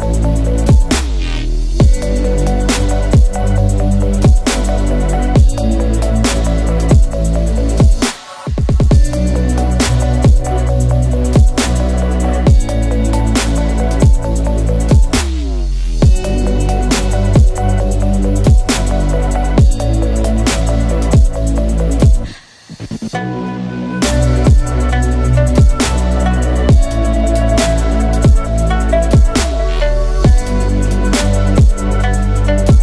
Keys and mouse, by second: 1.6 Tab, 2.3 KP_Divide, 2.9 alt+h, 3.5 KP_Divide, 4.1 a, 4.3 ctrl+s, 5.0 shift+middle drag, 5.3-5.7 middle drag, 6.1 shift+middle drag, 7.1-8.3 shift+middle drag, 11.6 ctrl+s, 11.8-12.4 middle drag, 13.0 shift+middle drag, 14.1 shift+middle click, 14.7 KP_Divide, 15.7-16.1 middle drag, 17.2 Tab, 18.7 shift+middle click, 19.7 shift+middle click, 20.3 shift+middle click, 21.3 click, 21.4 alt+click, 22.1 alt+shift+click, 22.6 alt+shift+click, 23.1 alt+shift+click, 23.7 alt+shift+click, 24.2 x, 25.7 shift+middle click, 26.2 middle click, 26.9 shift+middle click, 28.2 alt+click, 28.8 alt+shift+click, 29.3 alt+shift+click, 29.8 alt+shift+click, 30.3 alt+shift+click, 30.8 shift+middle click, 31.2 x, 32.6 shift+middle click.